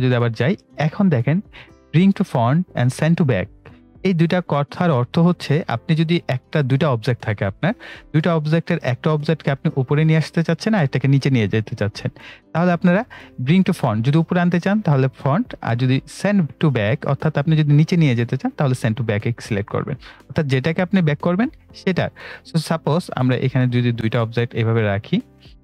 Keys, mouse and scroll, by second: 23.9-25.6 drag.